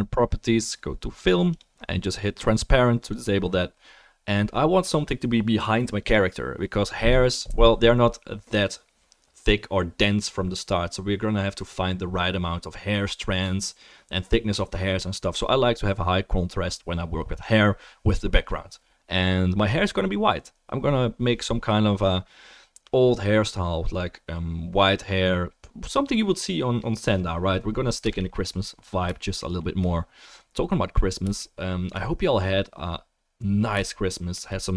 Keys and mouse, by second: 1.2 middle click, 1.5-3.1 middle drag, 32.1-34.7 middle drag.